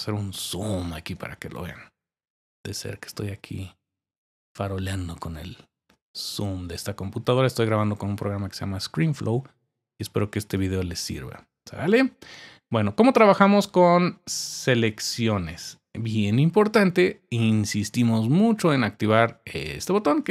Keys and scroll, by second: 2.2-4.1 typing.